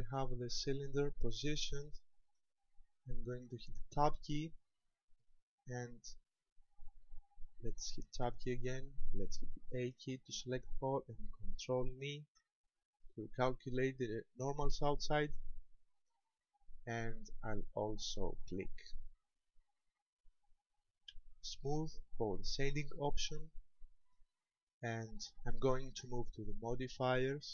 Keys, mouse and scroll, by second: 0.4 scroll down 1, 4.2 Tab, 4.9 scroll down 3, 5.7-6.1 scroll down 3, 8.4 Tab, 9.7 a, 9.9 a, 10.3 a, 12.3 ctrl+n, 19.4-20.1 scroll down 3, 20.1-20.8 scroll down 1, 20.8-22.1 scroll down 2, 22.1 scroll down 1, 22.5 click, 27.1 click.